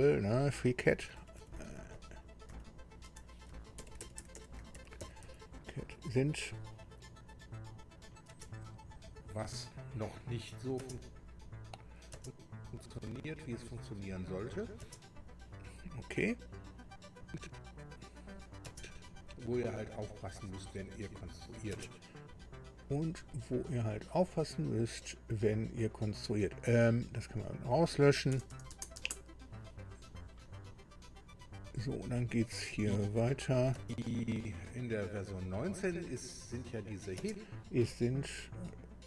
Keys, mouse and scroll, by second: 1.0 Delete, 1.4 Delete, 1.5 Delete, 1.6 Delete, 1.9 Delete, 3.3-5.7 typing, 8.0 click, 8.3 space, 10.8 space, 11.6 click, 12.1 space, 14.8 space, 16.8 click, 21.7 space, 22.8 click, 24.9 click, 27.3 click, 28.4 BackSpace, 28.7 BackSpace, 29.0 BackSpace, 29.6 BackSpace, 32.3 click, 32.8 click, 34.4 space, 37.2 space.